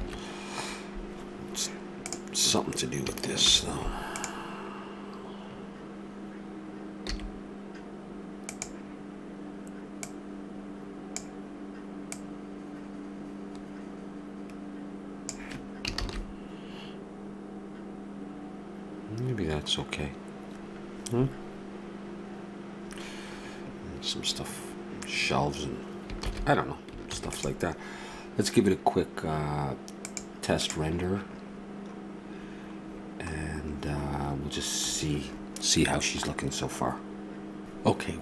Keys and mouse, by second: 1.0 shift+z, 2.1-4.3 drag, 3.5 shift+g, 7.1 s, 10.1-14.8 drag, 16.3 shift+z, 26.3 shift+z, 27.1 ctrl+s.